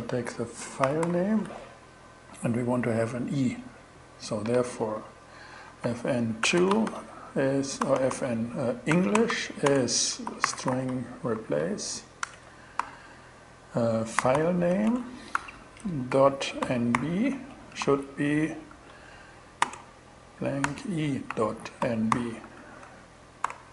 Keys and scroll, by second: 0.0-1.0 typing, 5.1 Right, 5.9-11.3 typing, 11.7 shift+Return, 12.2 alt+5, 13.4-22.4 typing, 22.9 alt+shift+6, 23.4 alt+shift+6, 23.4 alt+shift+Return.